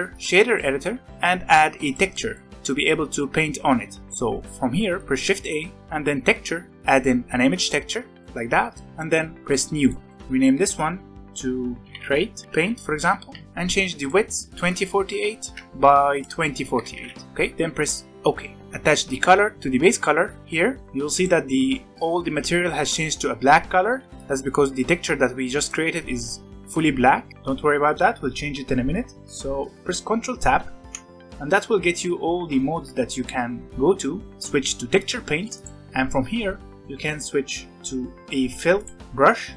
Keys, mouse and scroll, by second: 0.5-1.1 middle drag, 1.1 n, 1.2-1.8 scroll up 8, 1.8 click, 2.0-4.0 middle drag, 4.7 middle click, 5.2 shift+a, 8.4 scroll up 4, 8.7-9.7 middle drag, 9.7-11.8 drag, 11.8 BackSpace, 18.6 click, 20.8 middle click, 21.1 click, 21.9 click, 24.1 click, 27.3-30.6 middle drag, 30.6 ctrl+Tab, 38.7-39.5 drag.